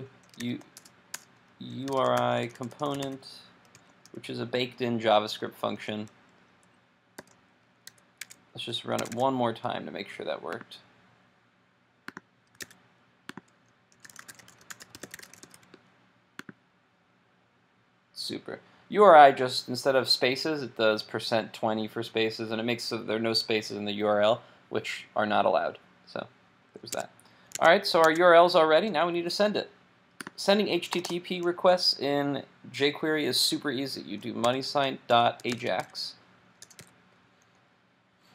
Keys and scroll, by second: 7.9 super+s, 8.4 super+Tab, 9.0 super+Tab, 12.6 super+r, 27.0 super+Tab, 27.7 super+Tab.